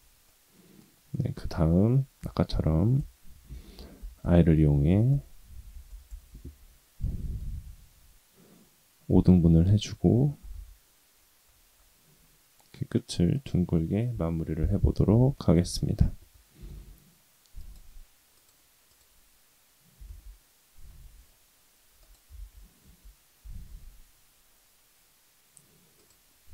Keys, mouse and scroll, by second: 0.2 middle click, 2.2 i, 3.5 i, 4.4 i, 5.5 i, 7.0 middle click, 7.4 scroll up 2, 9.3 middle click, 10.4 g, 14.1 KP_3, 15.3 shift+middle click, 15.7-16.3 scroll up 2, 16.5 g, 18.3-19.5 drag, 19.9 g, 22.3 ctrl+z, 23.4 g, 26.3-26.5 scroll down 6.